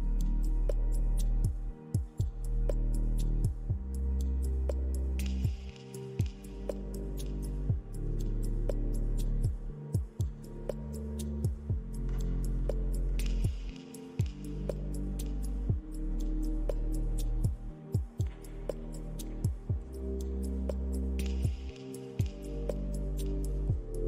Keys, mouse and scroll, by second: 0.7 right click, 1.8 middle click, 2.6 scroll down 2, 2.9-3.5 scroll up 2, 3.5 r, 7.0 middle click, 7.8 r, 10.0 scroll down 2, 10.4-11.1 scroll up 4, 11.6 click, 11.9 scroll up 2, 12.4 r, 14.3 middle click, 17.8 click, 18.8 click, 21.0 click, 22.0-22.4 scroll up 2, 23.4 middle click, 23.4 scroll up 1.